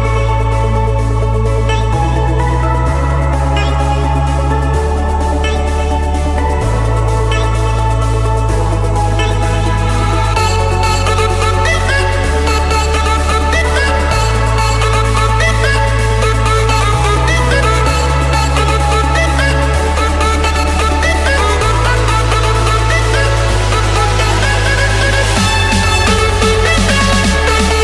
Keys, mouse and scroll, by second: 0.0-0.4 typing, 0.8 Return, 2.2-4.0 typing, 4.2 Return, 5.4-6.4 drag, 6.7-7.9 typing, 8.2 Return, 9.1 Escape, 9.3 Escape, 12.2 click, 13.0 click, 13.3 scroll, 14.0 click, 14.7 click, 15.6 click, 16.1 click, 16.3-17.1 scroll, 17.9 click, 18.2-18.6 scroll, 18.6 click, 18.8 Escape, 19.9 typing, 20.3 Return, 23.0 click, 24.2-24.7 typing, 25.0 Return, 26.0-27.8 typing.